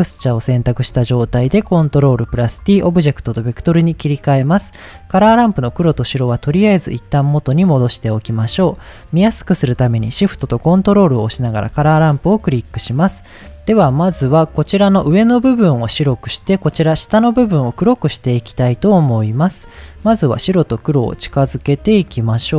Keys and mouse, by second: 1.1 ctrl+t, 1.5 middle click, 2.5-3.4 drag, 4.4 middle click, 5.2 drag, 5.8-6.3 drag, 6.6-6.9 drag, 12.2 middle click, 18.6 middle click, 19.5-20.2 drag, 20.6-21.1 drag, 21.4 click, 22.1-22.5 drag.